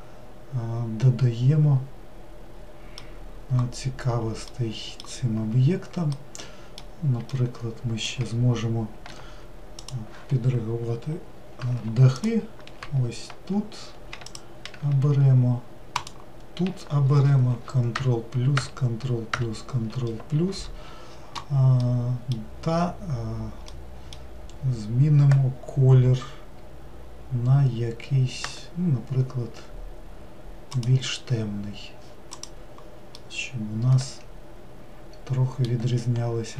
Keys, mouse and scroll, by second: 8.8-10.0 scroll up 1, 10.0 click, 16.2 ctrl+shift+click, 18.0 ctrl+KP_Add, 18.7 ctrl+KP_Add, 28.6 g, 32.6 click, 33.3-36.5 middle drag.